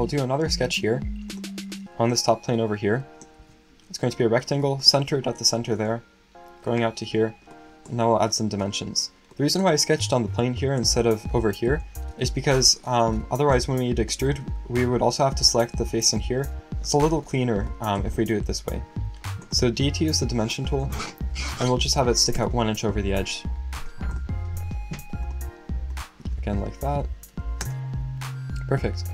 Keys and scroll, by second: 3.4 r, 18.4 d, 21.9 1, 27.2 1.